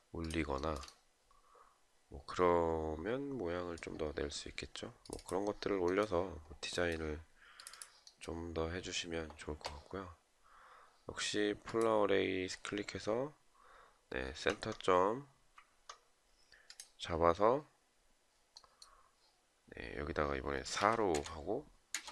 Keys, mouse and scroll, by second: 0.1 shift+right click, 0.3 shift+double right click, 20.5 Return.